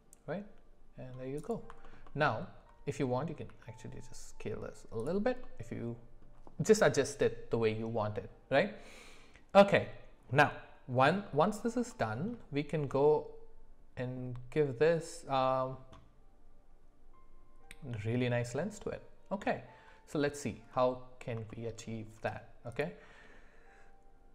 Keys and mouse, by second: 1.8 alt+middle click, 2.1 alt+middle click, 3.5 s, 5.4-6.2 middle drag, 11.3 middle click, 11.9-12.3 shift+middle drag, 20.7 middle click, 21.5-21.8 shift+middle drag.